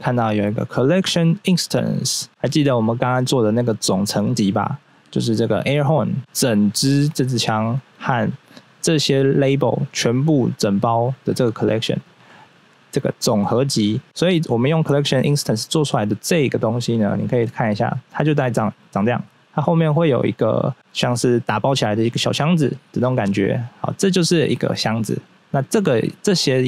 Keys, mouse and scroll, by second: 6.2 click, 11.7 scroll up 1, 13.2 click, 15.1 click, 16.0 click, 16.3 right click, 16.5 right click, 16.6 double right click, 16.9-19.1 scroll down 1, 23.7 right click, 25.2 right click, 25.6 right click, 26.0 right click, 26.4 right click.